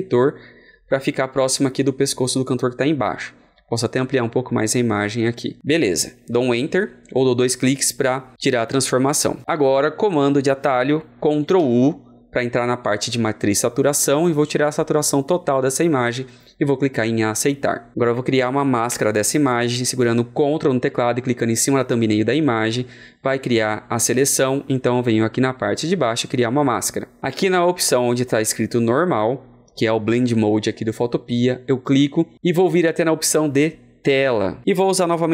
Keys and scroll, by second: 11.5 ctrl+u.